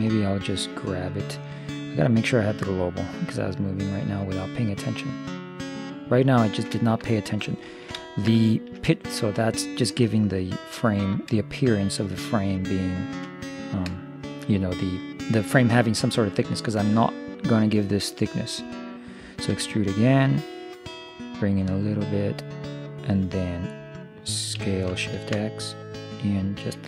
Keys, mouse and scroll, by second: 0.1-2.0 drag, 2.0 middle click, 3.4-5.3 drag, 6.5-19.5 middle drag, 19.5 e, 20.4-22.9 drag, 24.6 s.